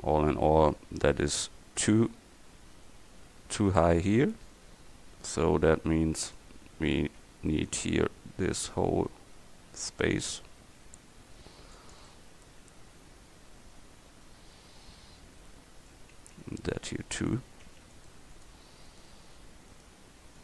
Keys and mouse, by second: 3.8 Tab, 4.4 a, 5.1 c, 7.1 c, 12.3-14.0 middle drag, 18.0-20.4 right drag.